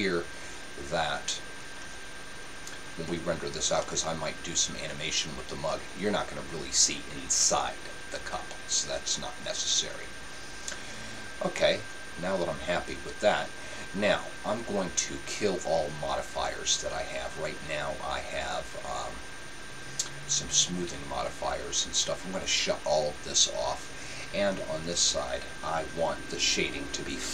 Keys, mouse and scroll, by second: 3.8-5.6 middle drag, 11.6-13.3 middle drag, 22.4-24.3 drag, 24.4-26.8 middle drag.